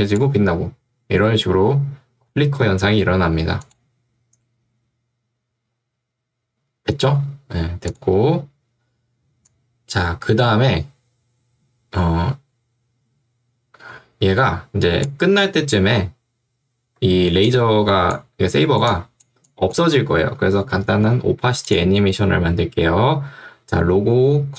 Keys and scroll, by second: 17.3 ctrl+2, 20.7 Escape.